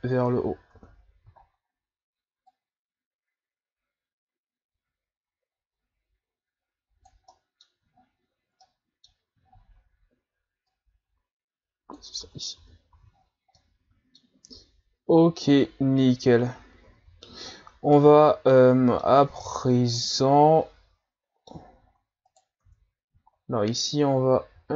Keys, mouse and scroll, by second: 0.1 scroll down 1, 0.7 Tab, 1.4 scroll up 1, 2.5-5.6 drag, 7.3 middle click, 7.9 scroll down 2, 8.2 scroll up 2, 8.7 middle click, 9.5 scroll up 5, 10.7-12.2 drag, 12.2 Tab, 12.6 a, 12.9 a, 13.1-13.6 scroll down 2, 13.6-15.0 middle drag, 15.0-16.4 ctrl+scroll up 5, 16.8 ctrl+s, 17.4 scroll up 4, 18.0-19.2 middle drag, 19.2-19.6 scroll down 5, 19.6-20.0 scroll up 3, 20.0-21.6 middle drag, 21.6-22.3 scroll up 6, 22.3 right click, 22.6 Tab, 22.9-23.2 scroll down 2, 23.2-23.9 scroll up 2, 24.4 s.